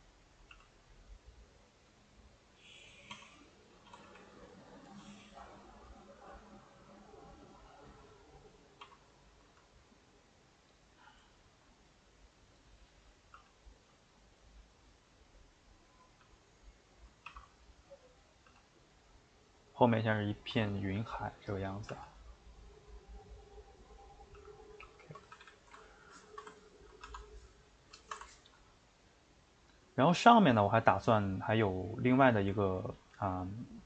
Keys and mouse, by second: 0.0-0.5 typing, 0.1 middle click, 3.9 s, 4.9 g, 8.8 s, 11.3-13.4 shift+middle drag, 13.4 g, 16.4 middle click, 17.3 shift+d, 17.9 middle click, 18.5 g, 19.9 middle click, 20.5 s, 21.5 middle click, 21.9 g, 24.4 g, 25.0 shift+middle click, 25.2 a, 25.4 a, 25.5-27.2 ctrl+middle drag, 27.2 Tab, 27.7-33.8 shift+middle drag.